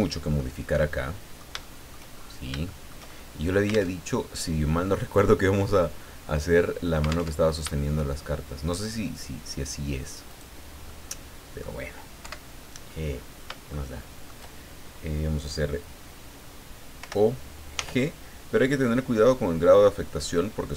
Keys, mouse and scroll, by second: 0.6 click, 1.6 shift+click, 2.1 shift+middle click, 2.4 shift+scroll up 1, 2.6-4.0 shift+middle drag, 4.0 alt+Tab, 7.3 alt+Tab, 10.3 right click, 10.9 middle click, 12.2 KP_7, 13.7 shift+middle click, 17.0 o, 17.7 g, 18.6-19.1 scroll up 2, 19.2-19.6 scroll up 2, 19.7-20.0 scroll up 2.